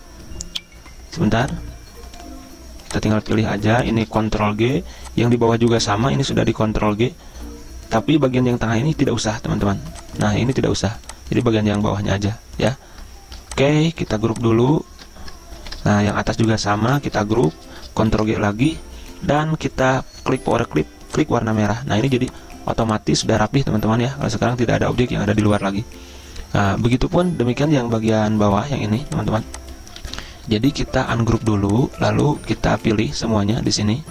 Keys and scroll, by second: 4.4 ctrl+g, 6.3 ctrl+z, 12.3 ctrl+z, 15.0 ctrl+z, 15.7 ctrl+g, 16.9 ctrl+z, 18.2 ctrl+g, 30.1 ctrl+z, 32.8 ctrl+z.